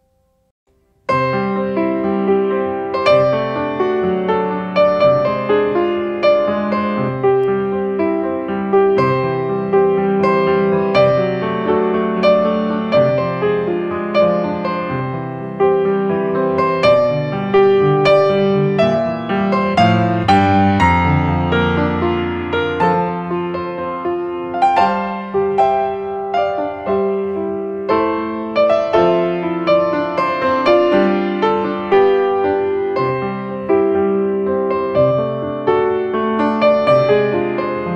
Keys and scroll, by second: 0.4 space, 13.4 ctrl+space, 18.7 space, 19.4 space, 20.4 space, 20.9 space, 24.5 space, 26.2 space, 28.9 space, 29.8 space, 35.1 space.